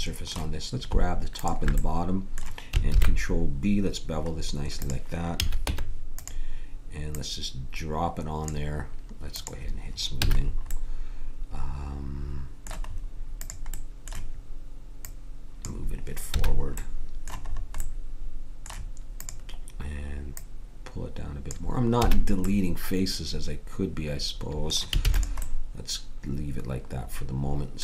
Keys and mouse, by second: 1.4-4.7 drag, 2.9 ctrl+b, 5.4 a, 5.6 Tab, 7.1-8.9 drag, 9.3-11.0 drag, 10.2 a, 13.4-15.6 drag, 16.3 a, 22.0 a, 25.0 ctrl+s.